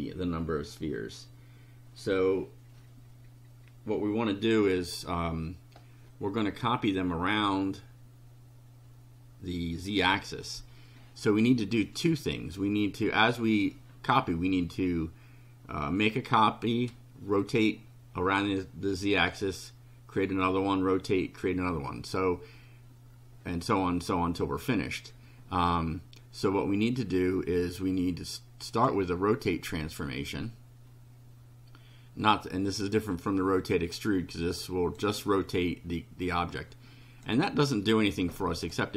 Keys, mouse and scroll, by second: 28.7 click, 33.1-35.1 drag, 36.3 click, 38.6 click.